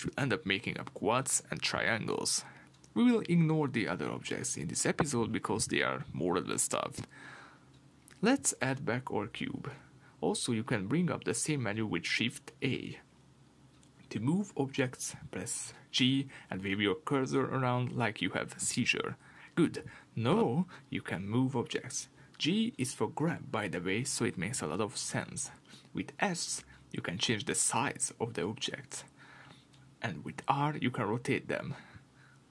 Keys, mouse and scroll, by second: 10.8 shift+a, 14.2 g, 16.4 Escape, 16.7 scroll down 1, 16.9-19.7 middle drag, 19.7 g, 21.1 Escape, 26.9 s, 29.7 Escape, 30.3 r, 32.0 Escape.